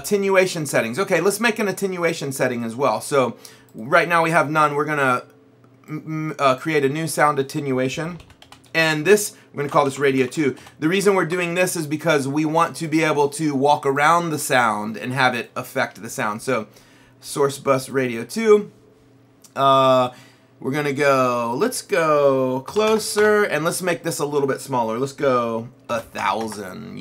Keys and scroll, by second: 8.0-11.1 typing, 11.3 Return, 22.7 KP_5, 23.2 Return, 25.9 KP_1, 26.2 KP_0.